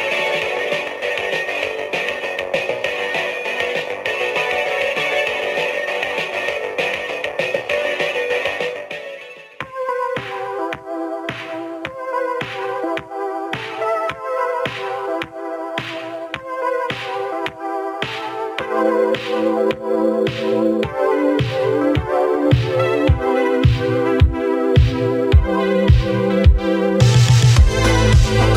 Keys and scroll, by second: 19.7 ctrl+d, 26.2-27.4 typing.